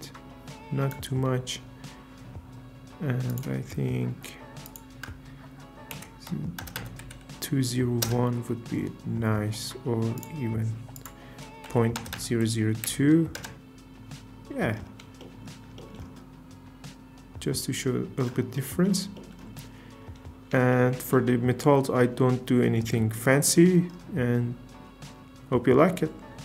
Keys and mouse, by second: 6.7 KP_0, 10.2 click, 12.1 KP_0, 23.1 shift+drag, 26.0 z.